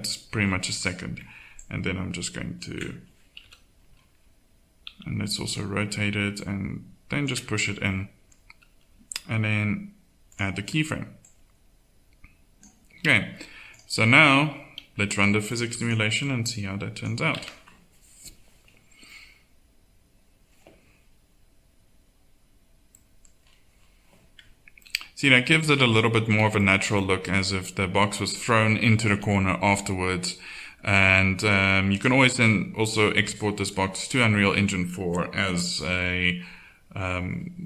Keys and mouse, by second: 1.6-3.4 drag, 3.4 KP_7, 4.9 r, 17.3 alt+a, 25.6-28.3 middle drag, 28.3-29.4 drag, 32.1-34.4 drag.